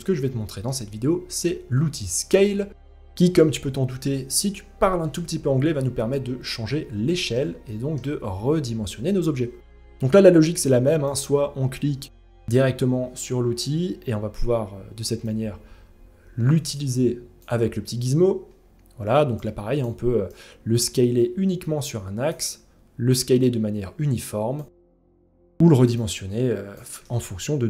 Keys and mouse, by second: 6.6 shift+middle drag, 7.2-7.5 middle drag, 8.6 shift+middle drag, 10.6 click, 14.9-16.9 drag, 19.0 click, 19.9-21.9 drag, 22.7-24.1 drag, 25.5 click, 26.6 ctrl+z, 27.2-27.6 drag.